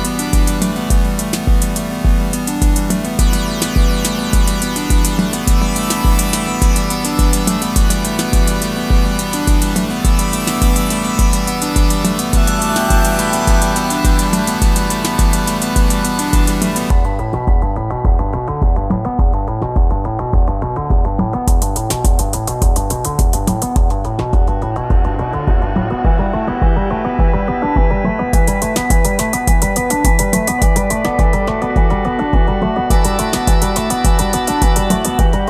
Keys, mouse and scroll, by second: 29.5 ctrl+click.